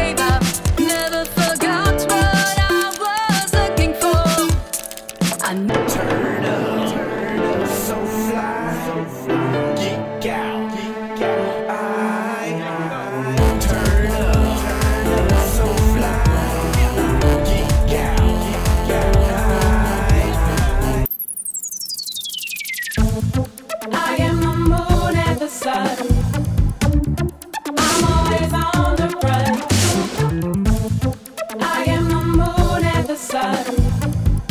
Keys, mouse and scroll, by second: 0.0-1.0 typing, 4.2 click, 4.4 click, 6.1 click, 6.8-8.5 typing, 10.2 click, 11.6-12.8 drag, 16.1 shift+click, 17.1 shift+click, 22.1 click, 29.6 click, 32.0 click, 32.7 Delete, 32.8 right click, 33.8 right click, 34.1-34.4 drag, 34.4 click.